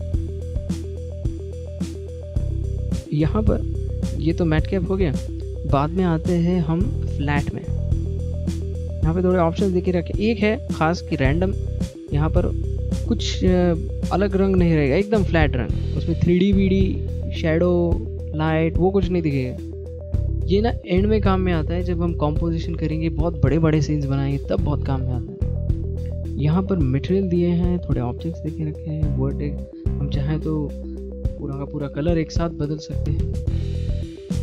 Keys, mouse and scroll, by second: 0.3 click, 10.5 middle click, 12.9 click, 15.1 click, 23.2 click.